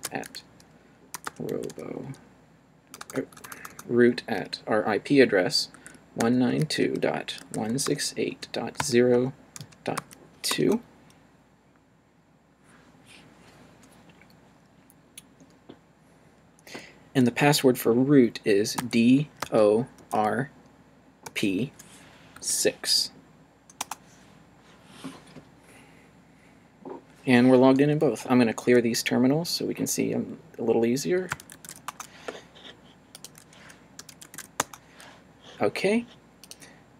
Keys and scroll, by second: 0.0-3.7 typing, 5.5-10.0 typing, 10.5 Return, 18.8 d, 19.4 o, 19.9 r, 21.2 p, 22.3 6, 23.8 Return, 28.6 c, 31.1-32.1 typing, 33.3-34.8 typing.